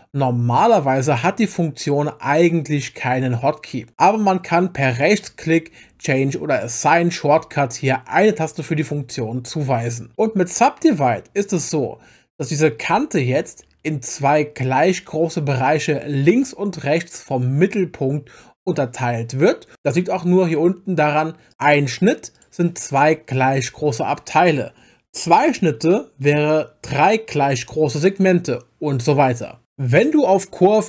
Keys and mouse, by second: 21.5 click, 22.4-25.8 drag.